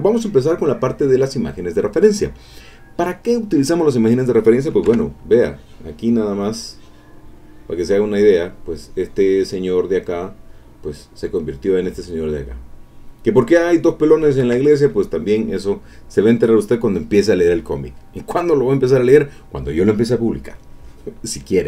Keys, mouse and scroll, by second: 4.9 ctrl+Tab, 5.7-7.0 drag, 7.1 click, 8.2 middle click, 12.5 click, 14.4 ctrl+Tab, 18.7 click, 20.0 click, 20.2-21.1 scroll up 1, 21.1-21.6 scroll up 1.